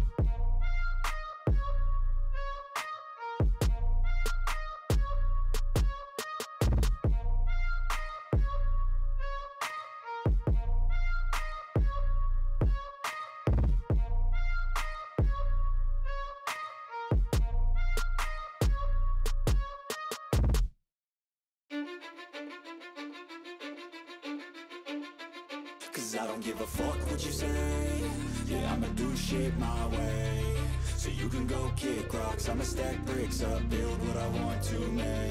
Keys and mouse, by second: 0.1 right click, 7.8 right click, 9.3 right click, 13.6 right click, 13.9 right click, 19.0 right click, 27.2 right click, 27.4 right click, 30.9 right click, 31.7 right click, 32.0 right click, 33.2 right click, 34.8 right click.